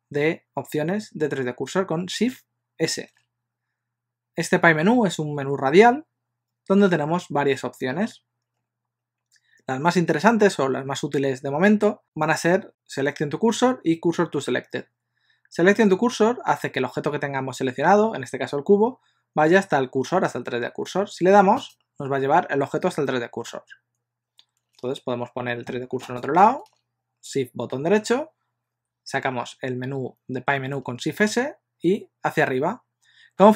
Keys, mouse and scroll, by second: 3.0 shift+s, 26.1 shift+right click, 31.1 shift+s.